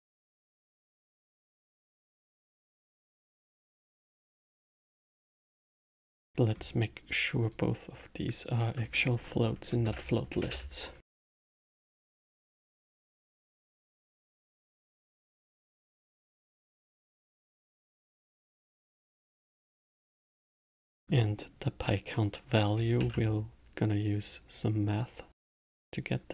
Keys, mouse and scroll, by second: 0.8 click, 1.7-4.4 middle drag, 4.4 click, 5.7 middle click, 6.5-7.4 scroll up 2, 7.4-11.5 drag, 12.5-15.6 drag, 18.5-22.9 middle drag, 22.9 shift+a.